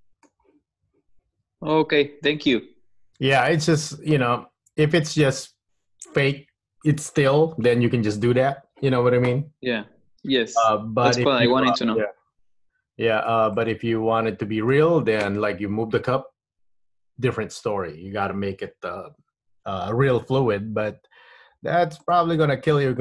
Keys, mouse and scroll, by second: 1.5 Tab, 2.0 middle click, 3.9 middle click, 12.1 click, 13.7 click, 21.2-22.2 scroll up 1, 22.2 click, 22.9 middle click.